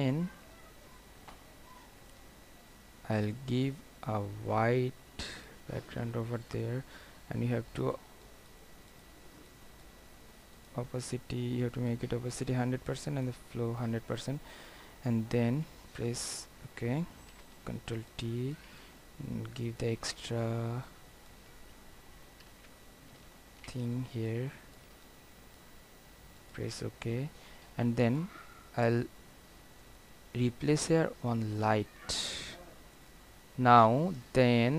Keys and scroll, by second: 17.4 ctrl+t, 22.6 ctrl+z.